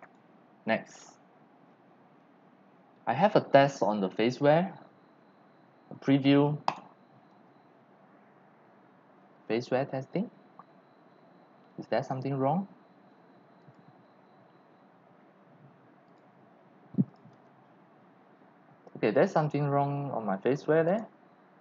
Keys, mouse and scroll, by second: 0.0 click, 2.8 click, 3.2 click, 6.7 click, 7.3 click, 11.1 click, 13.0 click, 13.6 click, 16.0 click, 17.1 click, 20.9 click, 21.0-21.6 drag.